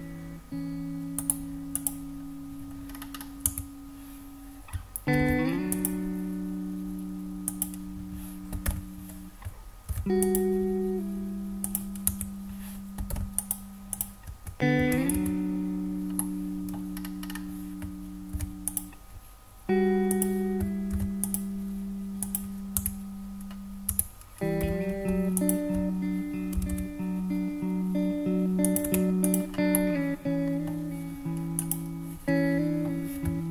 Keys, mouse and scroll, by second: 0.3 middle click, 1.2 right click, 2.9-3.3 scroll up 4, 3.4 Tab, 5.2 ctrl+r, 7.4 click, 8.6 alt+z, 9.9 ctrl+r, 11.6 click, 12.1 Tab, 13.1 alt+z, 13.4 drag, 13.9 click, 15.1 Tab, 16.1 middle click, 16.9-17.6 scroll up 5, 18.3 ctrl+r, 20.1 click, 20.9 ctrl+r, 22.2 click, 22.7 Tab, 23.9 Tab, 24.6 2, 25.3 alt+click, 26.5 g, 26.7 g, 28.6 click, 28.8 Tab, 29.2 click, 29.7-30.6 middle drag, 31.5 click, 32.6 ctrl+r, 32.6 click.